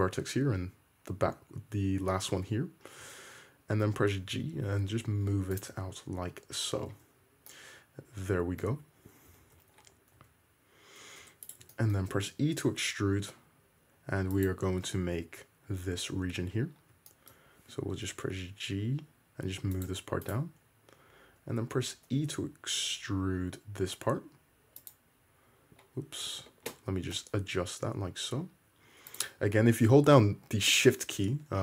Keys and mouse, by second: 3.1 `, 4.3 g, 5.7 `, 6.9 Tab, 8.7 `, 9.5 alt+z, 10.2 Tab, 11.2 middle click, 11.2 2, 11.5 click, 11.9-12.9 middle drag, 12.2 e, 14.5-20.3 middle drag, 18.1 g, 20.3 click, 20.4-31.6 middle drag, 21.5 2, 22.3 e, 27.2 g.